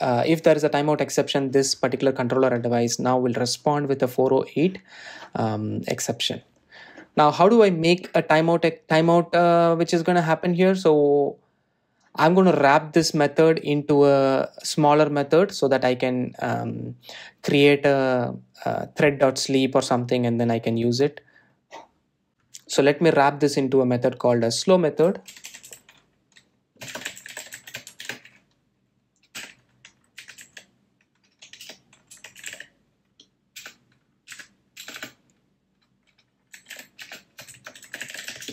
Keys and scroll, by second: 25.3 super+x, 34.9 Return.